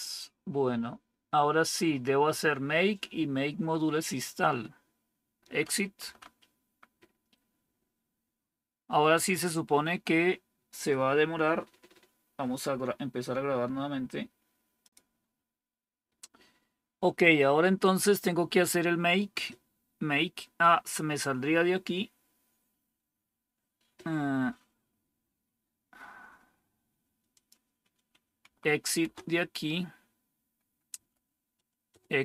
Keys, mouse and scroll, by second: 5.9 Right, 28.3 Right, 28.9 Return, 30.8 Right, 31.8 Return.